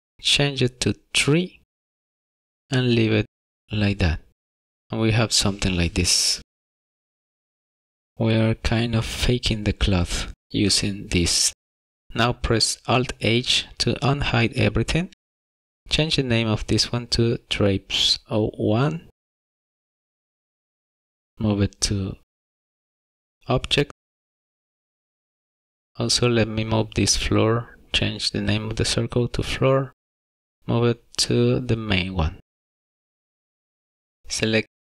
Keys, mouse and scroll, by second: 4.8 click, 5.5 click, 8.1-9.7 scroll down 2, 13.2 alt+h, 15.6 click, 17.4 click, 17.6 click, 25.4 click, 29.3 click, 29.9 click, 30.1 click, 32.0 o, 33.4 click.